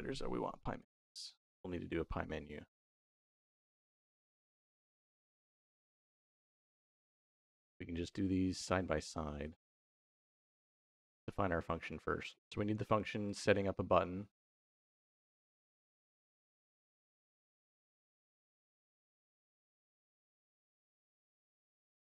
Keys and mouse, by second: 1.3 middle click, 1.9 middle click, 2.9 middle click, 4.1 middle click, 5.0-6.9 drag, 7.5 middle click, 8.3 middle click, 10.5 middle click, 11.0 middle click, 13.1 click, 13.9 middle click, 16.4 middle click, 17.2 middle click, 17.8 click, 18.3-22.0 drag, 20.7 s.